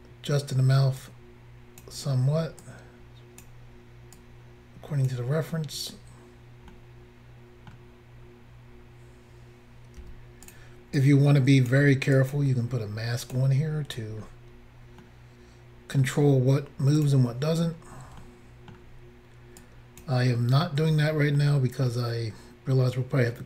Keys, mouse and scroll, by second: 2.7 click, 4.2 click, 6.8 middle click, 8.3 scroll up 1, 8.8 scroll up 2, 10.1 f, 10.5 click, 10.6 click, 11.0 click, 12.2 click, 12.3 click, 13.3 click, 13.4 click, 13.7 scroll down 2, 14.2 scroll down 2, 15.1 middle click, 17.0 click, 17.1 click, 17.7-18.2 scroll down 1, 18.2 shift+middle click, 19.6 click, 21.4 shift+middle click.